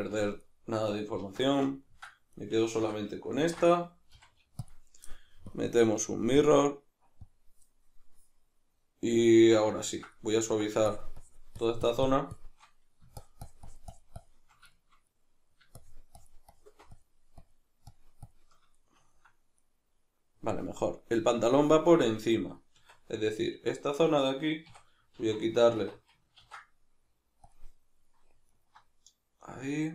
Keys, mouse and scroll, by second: 0.1 v, 0.5 right click, 1.2 alt+q, 1.7-2.3 ctrl+middle drag, 2.3 right click, 2.8 l, 3.4 ctrl+i, 4.1 x, 5.5-7.3 drag, 9.3 Tab, 9.9-10.9 ctrl+middle drag, 10.9-14.7 shift+drag, 14.7-15.8 shift+middle drag, 15.8-18.8 shift+drag, 18.8-25.2 middle drag, 22.8 Tab, 24.7 a, 25.2 alt+e, 25.9 Escape, 26.4 ctrl+e, 28.5 alt+right click.